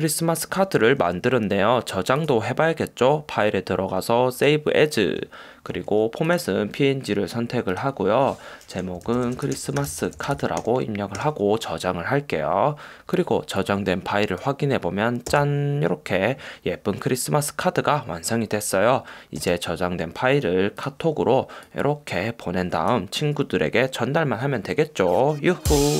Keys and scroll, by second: 8.8-11.0 typing, 15.5 space, 19.6 space.